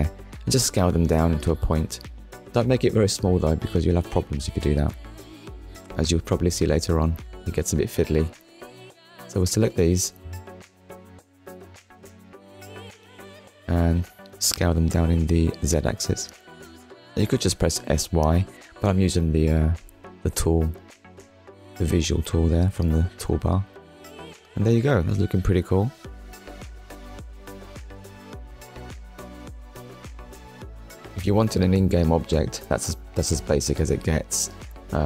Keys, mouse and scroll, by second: 0.9 click, 5.6 scroll down 1, 6.1 shift+middle click, 6.6 middle click, 7.6 click, 8.5 shift+click, 9.0 middle click, 10.3 middle click, 11.0-11.4 scroll up 1, 11.5 middle click, 12.3 shift+click, 13.0 shift+click, 13.8 middle click, 16.0-16.4 scroll up 1, 17.3 click, 23.6 Tab, 24.2 scroll down 1, 24.8 click, 25.1 middle click, 26.2 click, 26.7 middle click, 32.4 click, 33.1 click, 33.4 shift+middle click, 34.5 scroll down 1.